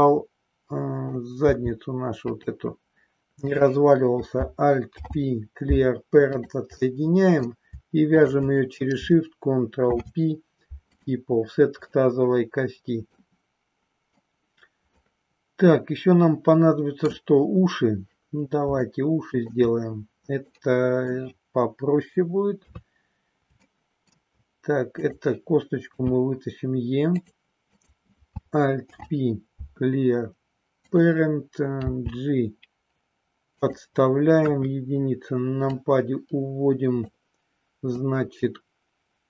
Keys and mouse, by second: 1.4 g, 3.4 click, 4.7 alt+p, 6.9 middle click, 9.7 ctrl+p, 11.9-13.1 middle drag, 15.0-17.0 middle drag, 18.9 shift+middle click, 20.5 middle click, 22.6 KP_3, 23.6 shift+middle click, 25.9 e, 27.8 click, 28.9 alt+p, 31.7 g, 33.6 click, 34.4 KP_1, 35.6-37.1 drag, 38.0-39.2 drag.